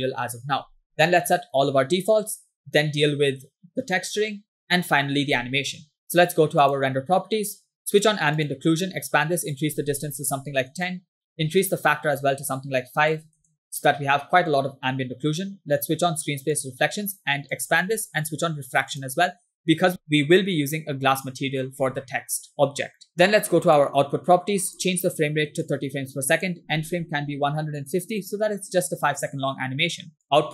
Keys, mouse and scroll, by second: 6.7 click, 8.0 click, 8.4 click, 9.5-10.7 drag, 11.7-13.5 drag, 16.7 click, 17.6 click, 17.9-18.9 scroll down 2, 18.9 click, 23.7 click, 24.7-25.9 drag, 26.4-28.2 drag, 29.4 scroll down 1, 30.2-30.5 drag.